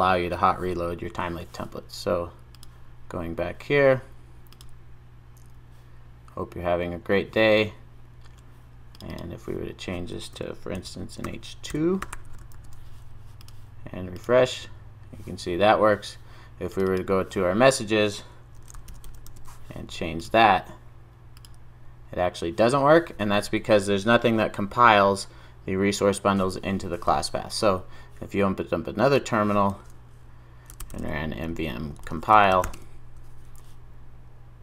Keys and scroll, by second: 12.6 super+s, 19.3 super+s.